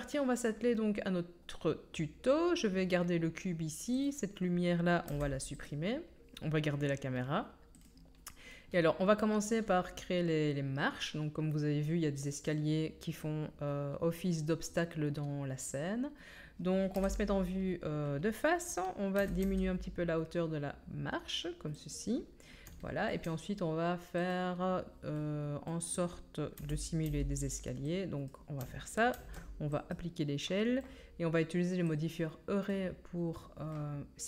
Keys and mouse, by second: 4.0-15.7 right drag, 5.0 x, 15.7-19.9 drag, 16.9 KP_1, 19.2 s, 19.9-24.2 right drag, 24.2 middle click, 24.4-27.8 right drag, 26.5 s, 27.8-32.0 drag, 29.1 ctrl+a, 32.0-32.6 middle drag.